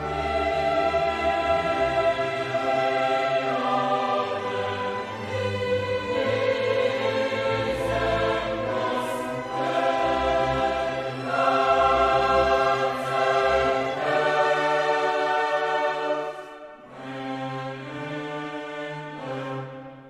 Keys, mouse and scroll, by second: 0.1 click, 1.0 click, 3.0 click, 4.5 click, 5.3 click, 6.0 click, 7.2 click, 8.0 click, 8.5 click, 9.5 0, 10.2 click, 11.1 click, 12.4 click, 13.8 click, 15.3 click, 16.3 click, 18.0 click.